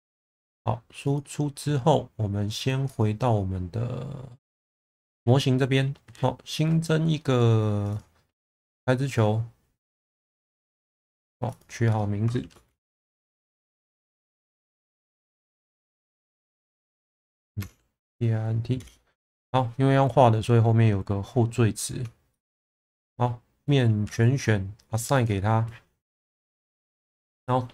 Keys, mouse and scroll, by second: 1.0 click, 2.9-4.8 drag, 7.9-18.8 drag, 24.0 a, 25.2-25.6 drag.